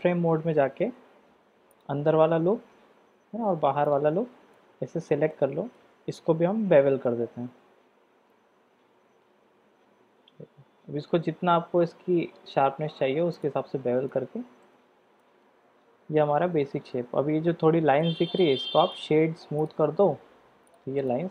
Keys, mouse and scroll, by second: 4.5 click, 5.4 shift+click, 6.6 ctrl+b, 14.1 middle click, 14.9 Tab, 15.2-16.8 middle drag, 18.0 middle click, 19.0 right click, 20.6 click, 21.1-21.3 middle drag.